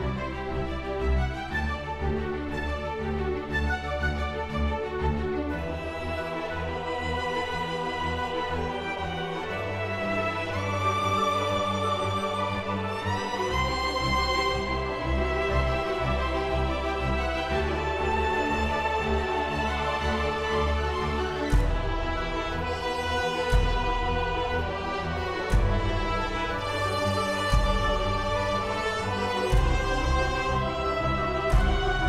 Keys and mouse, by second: 3.7 KP_0, 4.2 click, 5.2 right click, 5.9 KP_0, 6.1 middle click, 6.3 middle click, 6.7 click, 7.0 middle click, 7.5 click, 7.5 g, 8.7-11.2 drag, 11.7 click, 12.4-13.8 drag, 12.6 KP_0, 13.5 KP_0, 14.0 middle click, 14.4 click, 14.7 click, 15.0 right click, 15.0 g, 15.2 click, 15.3 g, 15.4 click, 15.6 click, 16.4 shift+d, 16.7 click, 16.9 click, 18.0 middle click, 18.5 click, 18.8 click, 19.4 click, 20.0 KP_0, 20.4 shift+d, 20.7 shift+z, 20.9 click, 21.8-22.9 drag, 22.2 KP_0, 23.0 middle click, 23.3 middle click, 24.3-25.5 drag, 24.6 KP_0, 25.3 KP_0, 26.4 click, 26.7 click, 26.9-28.4 shift+drag, 28.5 click, 29.9-31.0 drag, 31.0 KP_0.